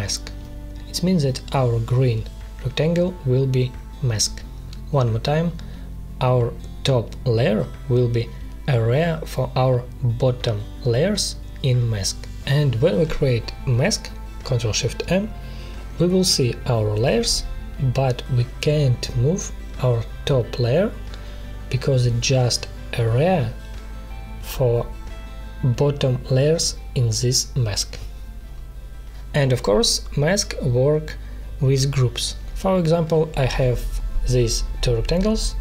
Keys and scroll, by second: 8.9 ctrl+shift+m, 23.5 ctrl+z, 31.1 ctrl+z, 33.6 Delete.